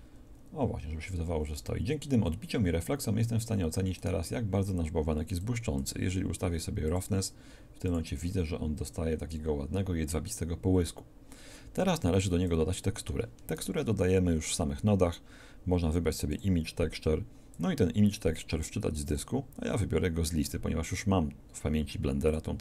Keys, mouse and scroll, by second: 16.3 shift+a.